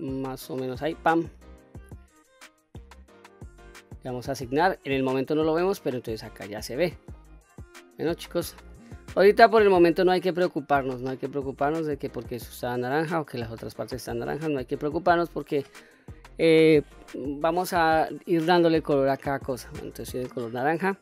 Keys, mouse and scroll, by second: 3.3 click, 5.2 click, 6.0 middle click, 6.0-6.8 scroll down 1, 7.4-8.0 scroll up 1, 8.0-8.5 middle drag, 8.9-9.5 scroll down 2, 9.5-10.0 middle drag, 13.4-13.9 middle drag, 14.4-14.9 middle drag, 17.9-18.9 scroll up 2, 18.9-19.6 middle drag, 19.9-20.5 scroll down 1, 20.6 middle click.